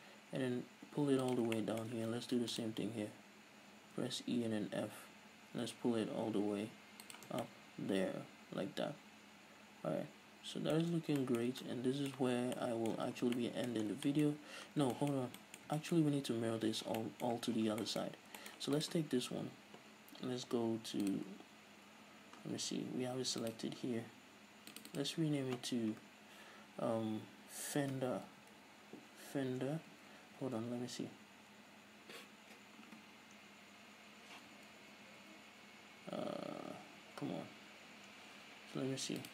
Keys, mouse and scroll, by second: 1.7 shift+click, 1.9 shift+middle click, 2.7 ctrl+r, 7.4 middle click, 7.4 shift+click, 7.6 Tab, 7.7-13.4 middle drag, 11.2 Tab, 12.5 Tab, 12.7 scroll down 2, 13.2 a, 13.5 scroll down 4, 13.5 a, 13.7-14.2 middle drag, 14.2 scroll down 2, 14.4 shift+middle drag, 14.6-15.0 scroll up 2, 15.0 scroll down 2, 15.2-19.1 shift+middle drag, 18.4-18.7 scroll up 2, 19.1-19.4 right drag, 21.4-22.3 drag, 22.3-22.6 scroll down 1, 23.7 click, 25.0-30.6 drag, 30.4 BackSpace, 31.0 Tab, 33.4-33.8 scroll up 1, 37.7 ctrl+z, 37.7 scroll down 1, 38.2-38.6 scroll up 1.